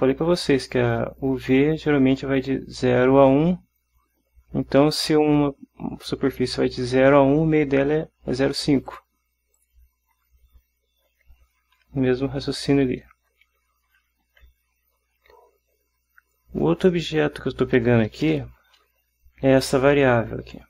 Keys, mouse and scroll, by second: 9.0 click, 9.7 click, 11.3 Right, 12.0 Left, 12.4 Right, 12.9 space, 13.9 Left, 16.5 click, 18.2 BackSpace, 18.7 space.